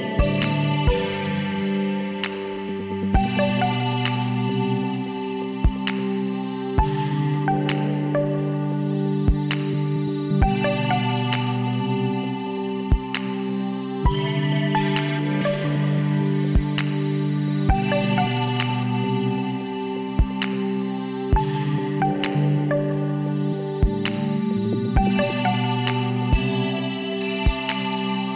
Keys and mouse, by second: 4.1-5.9 drag, 4.5 g, 6.3 ctrl+z, 7.0 b, 8.7 g, 12.5 middle click, 12.9 z, 13.4-19.1 drag, 15.4 f, 18.8 f, 19.1 middle click, 20.3-22.6 drag, 21.9 f, 25.1 f, 25.5 middle click, 26.2 KP_7, 27.7 z.